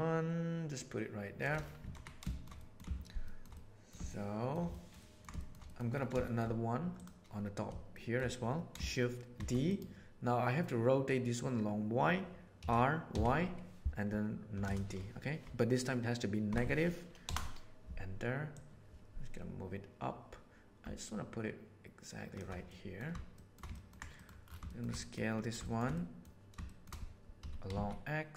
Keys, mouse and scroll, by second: 1.8 alt+a, 2.3 shift+middle click, 2.5 middle click, 3.2 middle click, 3.5 middle click, 4.0-4.5 shift+middle drag, 4.7-5.1 ctrl+middle drag, 5.4 shift+middle click, 5.6 middle click, 6.3 shift+middle drag, 7.8 shift+middle click, 9.3 shift+d, 12.5 r, 18.5-22.3 middle drag, 22.7 middle click, 23.3 shift+middle click, 23.7 ctrl+middle click, 24.1 middle click, 25.0 middle click, 25.7 shift+middle click, 25.9-26.3 middle drag, 26.6 shift+middle click, 27.5 s.